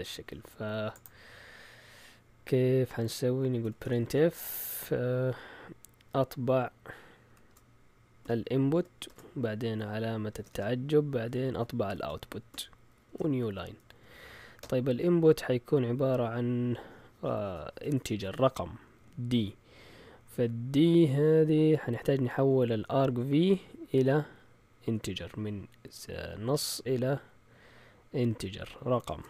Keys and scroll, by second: 3.3-4.6 typing, 7.2-9.0 typing, 10.3 typing, 11.8-14.6 typing, 13.9 Right, 28.9 shift+super+z.